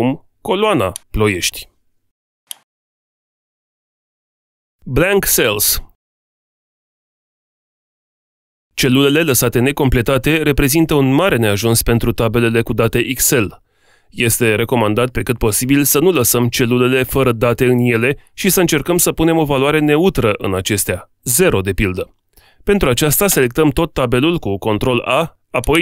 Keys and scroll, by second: 23.2 ctrl+a.